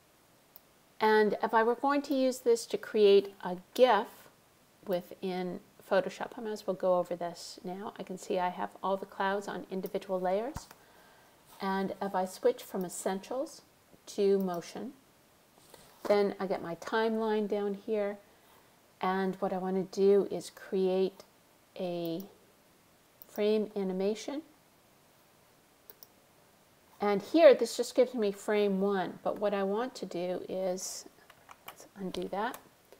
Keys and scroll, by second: 31.7 super+z.